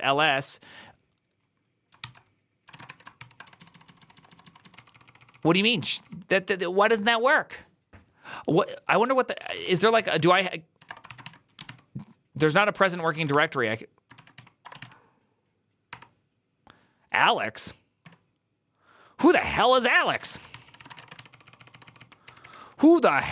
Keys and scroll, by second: 1.6-6.6 typing, 2.6 ctrl+a, 9.4-15.7 typing, 12.4 ctrl+c, 17.9 Tab, 20.0 ctrl+c, 20.4-22.8 typing.